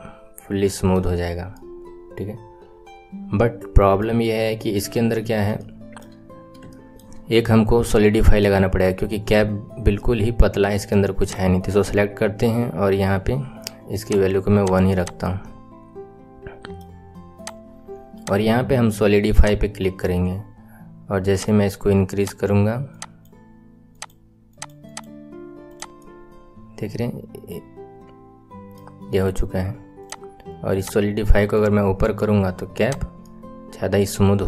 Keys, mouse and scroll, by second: 3.4-4.4 right drag, 4.4-4.9 scroll up 2, 4.9 KP_1, 5.2 scroll down 1, 5.5-6.2 right drag, 5.5 shift+middle click, 6.2-6.5 scroll down 3, 6.6-7.1 right drag, 6.6 shift+middle click, 8.6 right click, 9.5-9.9 scroll up 4, 9.9-11.2 middle drag, 11.2 click, 13.9-15.0 drag, 15.2-16.2 middle drag, 16.3 middle drag, 16.8-17.3 middle drag, 17.3 click, 18.1-21.1 drag, 21.3-25.7 drag, 25.9-26.5 middle drag, 26.6 middle click, 27.1-28.9 middle drag, 29.9-31.5 drag, 32.7 click, 33.2-34.4 middle drag.